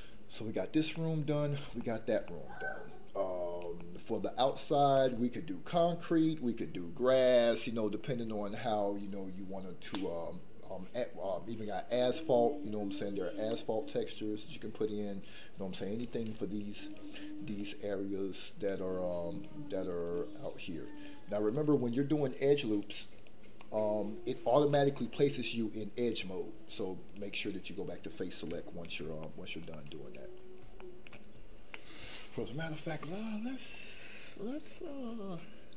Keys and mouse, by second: 0.0 middle click, 1.1 middle click, 2.1-3.5 middle drag, 3.8 shift+middle click, 16.9 click, 18.6 click, 20.9 click, 21.4 click, 22.7 click, 29.2 shift+middle click, 29.6 middle click, 30.8 shift+middle click.